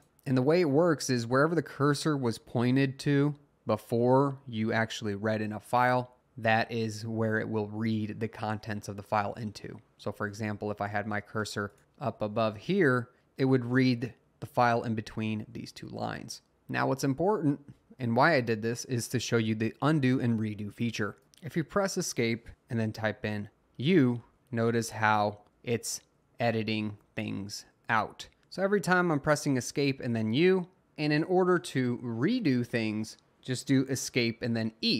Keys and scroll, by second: 11.9 Up, 12.1 Up, 15.4 Down, 15.6 Up, 21.2 Escape, 24.4 Escape, 24.9 Escape, 25.1 u, 29.2 Escape, 29.4 u, 29.9 Escape, 30.1 u, 33.9 Escape, 34.2-34.9 typing.